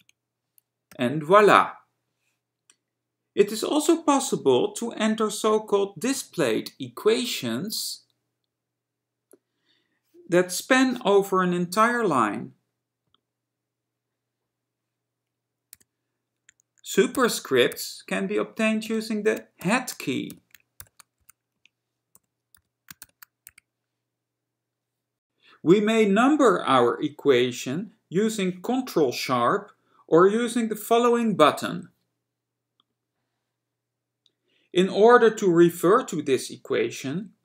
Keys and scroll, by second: 0.0-0.1 typing, 1.1 ., 13.5 alt+$, 18.9 Right, 20.5 y, 21.6 Right, 23.2 shift+6.